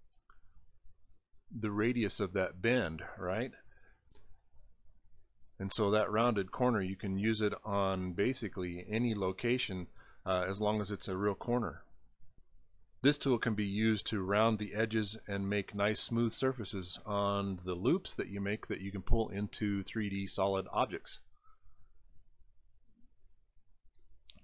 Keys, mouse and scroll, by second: 7.6 click, 8.8 click.